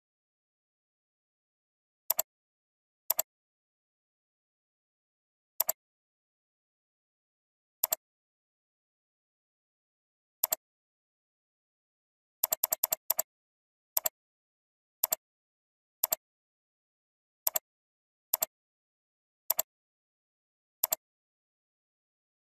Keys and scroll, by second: 4.3 ctrl+alt+z, 11.9 ctrl+space, 21.6 ctrl+alt+z.